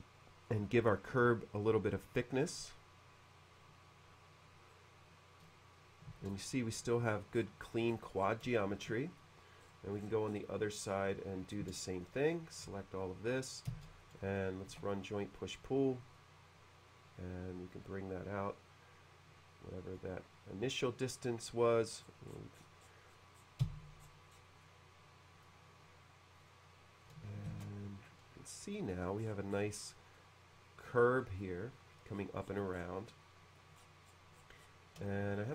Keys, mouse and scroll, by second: 4.7 middle click, 6.1 space, 6.3 click, 6.5 click, 6.7 click, 7.0 middle click, 8.2 middle click, 8.5 shift+middle click, 9.6-10.6 scroll up 2, 10.9 scroll down 1, 11.7 space, 11.7 click, 12.0 click, 12.2 click, 12.8 b, 13.7 space, 14.0 click, 14.2 click, 14.4 click, 14.7 d, 16.2-20.0 drag, 20.7 middle click, 22.0 middle click, 23.1 middle click, 23.7 space, 24.0-25.5 middle drag, 26.5 click, 27.6 shift+c, 27.6 space, 28.1 middle click, 29.2-30.2 scroll up 1, 30.2-31.4 middle drag, 32.2-33.1 scroll down 1, 33.1 middle click, 33.8-34.7 scroll down 3, 35.1 shift+middle click.